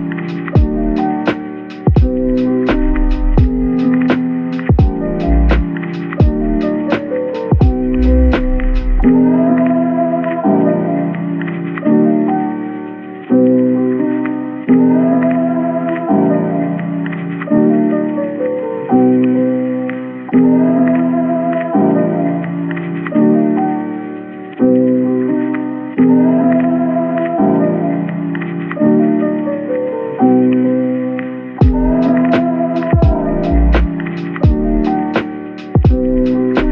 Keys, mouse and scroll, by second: 3.2 middle click, 5.0-5.8 scroll up 1, 6.2 Tab, 7.8 typing, 9.5-10.0 typing, 14.6 Tab, 14.8 middle click, 14.8 Tab, 18.6 Tab, 19.7 typing, 20.7 typing, 21.6 Tab, 22.2 middle click, 23.7-24.1 scroll down 1, 24.1 middle click, 29.1 shift+right click, 29.6 typing, 31.9-32.5 typing, 33.8-35.0 typing, 35.7 Return, 36.0-36.7 typing.